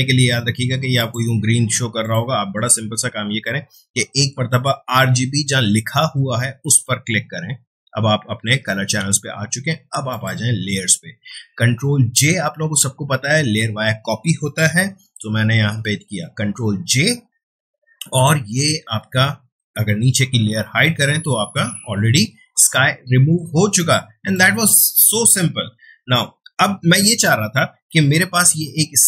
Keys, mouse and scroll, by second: 6.6 click, 10.1 click, 15.7 ctrl+j, 18.1 click, 19.2 ctrl+space, 20.2 ctrl+space, 20.6 ctrl+click, 20.7 ctrl+space, 22.7 click, 22.8 space, 27.7 space, 27.9 ctrl+Tab.